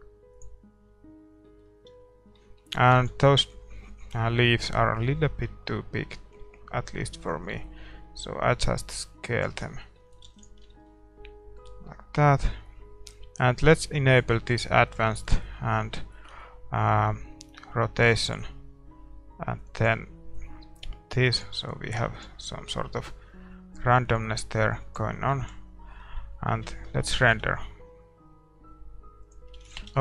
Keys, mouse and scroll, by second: 1.2 scroll down 1, 1.4 middle click, 1.9 a, 4.9 ctrl+s, 4.9-6.7 drag, 5.5 middle click, 9.8-14.1 middle drag, 10.7 ctrl+s, 14.1-22.6 drag, 18.3-20.6 middle drag, 22.6 ctrl+s, 22.6-24.6 middle drag, 23.8-25.8 drag, 25.8 ctrl+s, 25.8-29.2 middle drag, 27.4 shift+z, 29.6-30.0 drag, 29.8 shift+z.